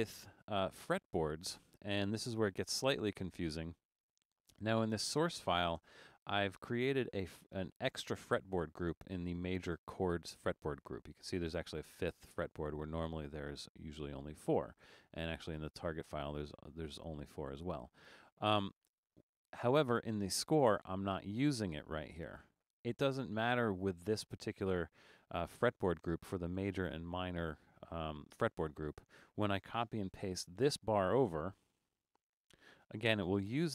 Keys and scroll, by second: 5.8 Return, 30.2 super+c, 32.1 super+v.